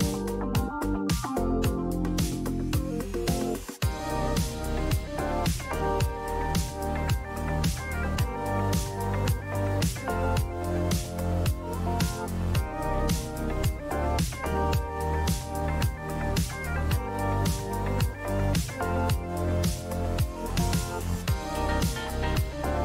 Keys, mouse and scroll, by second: 0.6 click, 2.1 click.